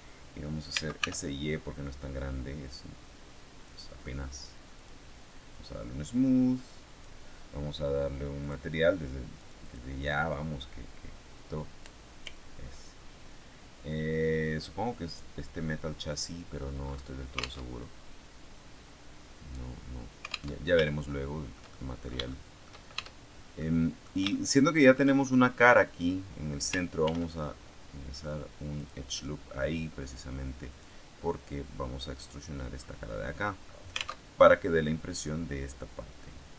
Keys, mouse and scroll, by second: 0.6 s, 0.9 y, 3.6 click, 4.6 click, 6.0-7.1 drag, 8.3 click, 9.5 click, 9.9 click, 13.0-13.5 scroll down 2, 15.0 click, 16.2-16.6 scroll down 2, 17.6 alt+Tab, 20.5 alt+Tab, 21.0-23.1 shift+middle drag, 22.9 shift+Tab, 23.5 middle click, 24.2 shift+middle click, 27.0 ctrl+r, 28.7 click, 29.0 click, 30.6 click, 32.0 right click, 32.8-33.2 scroll down 2, 33.2 middle click, 33.7 scroll up 2, 34.2 alt+Tab.